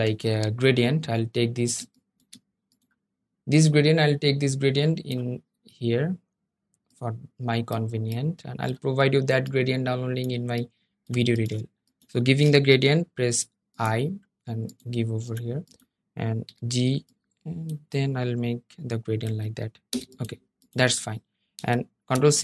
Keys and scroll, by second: 12.5 i, 16.0 g, 21.8 super+c, 22.2 super+f.